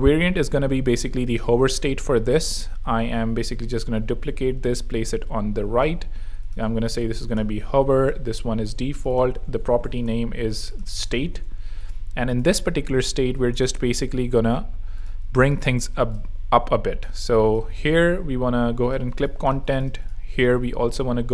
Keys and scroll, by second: 3.2 super+d, 6.4-7.7 typing, 9.2-11.6 typing, 13.5 super+0, 14.5 super+0, 15.3 super+z, 16.1 space, 17.7 alt+z, 19.0 z, 19.5 space, 19.8 z.